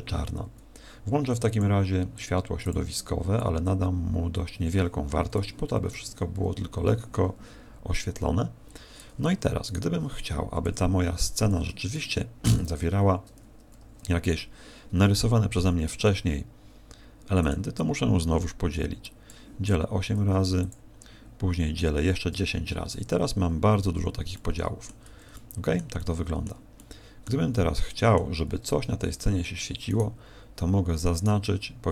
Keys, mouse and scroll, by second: 1.5 click, 2.6 click, 3.3 click, 8.7 Escape, 9.6 right click, 10.6 KP_7, 11.2 Tab, 11.9 shift+middle click, 12.8 z, 15.5 w, 19.0 click, 20.1 w, 22.3 Tab, 22.9 Tab, 23.2-23.9 scroll up 4, 23.9 a, 24.3 middle click, 25.1 z, 25.3 middle click, 25.9 middle click, 26.7 middle click, 27.5 middle click, 30.3 alt+shift+right click, 31.5 alt+shift+right click.